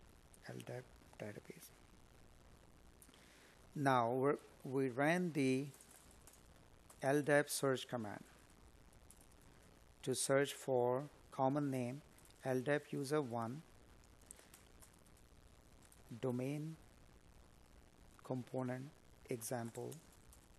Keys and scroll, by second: 4.1 space, 4.8 space.